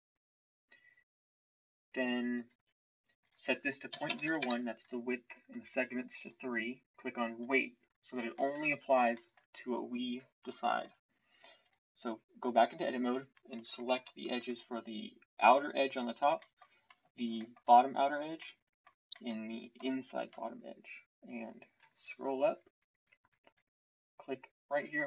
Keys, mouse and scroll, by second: 10.8 Tab.